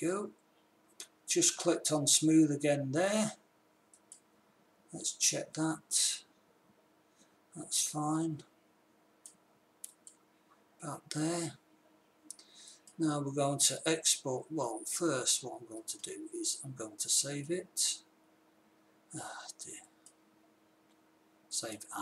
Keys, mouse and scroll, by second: 4.3-5.1 drag, 7.6-8.7 middle drag, 10.3-12.1 drag, 13.0-14.7 drag, 14.9 click, 15.3 click, 15.6 click, 16.2-17.6 drag, 17.8-20.2 middle drag.